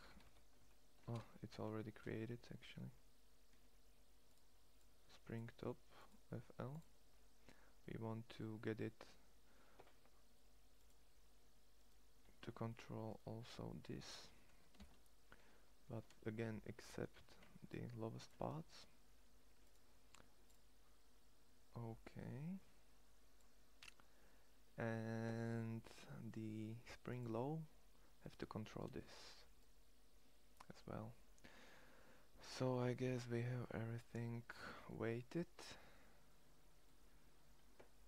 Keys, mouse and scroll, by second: 7.0-8.3 middle drag, 10.4 middle click, 14.4 ctrl+l, 16.8 c, 19.7 middle click, 23.6-26.8 middle drag, 28.6 ctrl+l, 33.0 middle click, 34.5 click, 34.6 middle click.